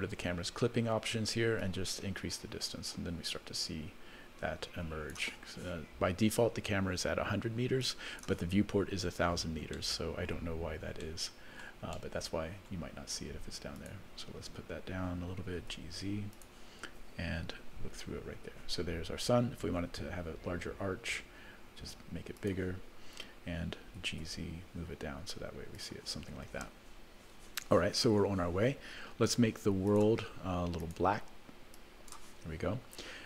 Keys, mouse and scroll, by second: 1.6-5.2 drag, 7.8 click, 9.7 middle click, 10.4-11.2 scroll down 4, 11.5 middle click, 11.9 middle click, 12.9-13.5 scroll down 1, 13.7 click, 15.4 g, 17.7 KP_0, 19.8 s, 24.0 g, 29.9 click, 30.8 click.